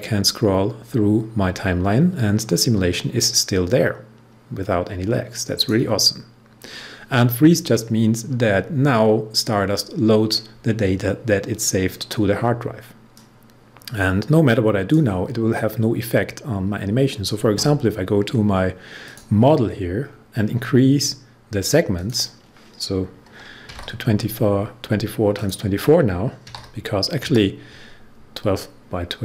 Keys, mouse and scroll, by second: 13.3-17.3 drag, 19.0 click, 19.9 scroll down 1, 21.9 click, 23.6-24.2 typing, 25.3 click, 26.2-27.1 typing.